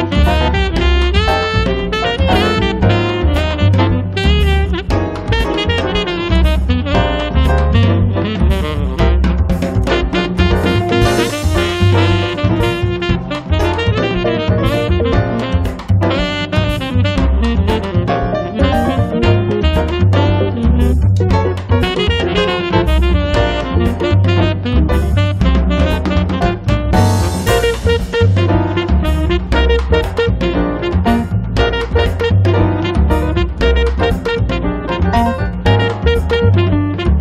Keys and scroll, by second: 0.4 space, 0.9 Escape, 2.6 r, 15.6 e, 22.2 p, 26.1 2, 26.5 0, 26.7 Return, 27.6 space, 28.0 Escape, 31.2 r.